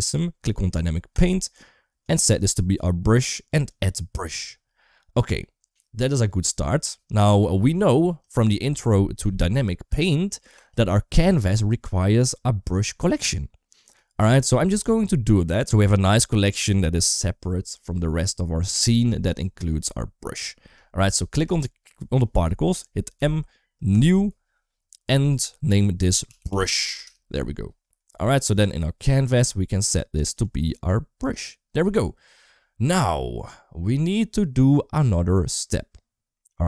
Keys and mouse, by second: 0.9 click, 1.8 click, 3.5 click, 23.0 m, 26.8 Return, 30.2-31.3 drag.